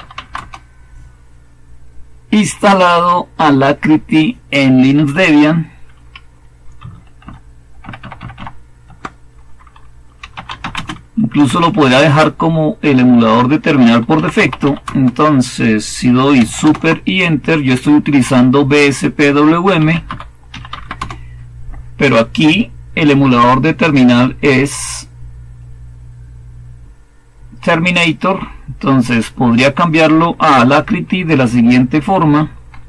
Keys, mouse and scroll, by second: 0.0-0.4 typing, 7.1 ctrl++, 7.7 ctrl++, 7.9 ctrl++, 8.1 ctrl++, 9.9-11.8 typing, 13.8-15.0 typing, 16.5 super+Return, 19.4-20.9 typing, 32.6-32.8 typing.